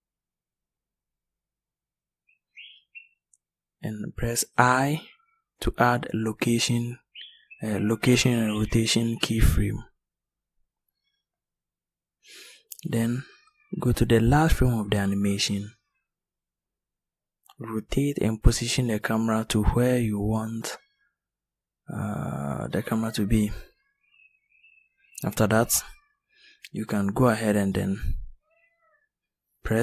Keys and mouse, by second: 3.3 i, 6.2 i, 13.5-16.2 drag, 16.9 click.